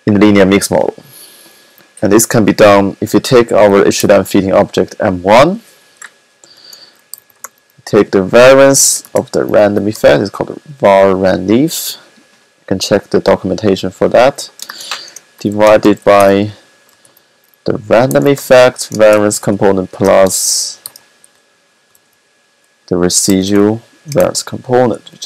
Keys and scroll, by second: 3.8-4.5 typing, 6.5-7.4 typing, 8.8-9.6 typing, 14.6-16.8 typing, 18.0-21.9 typing, 23.1-24.1 typing.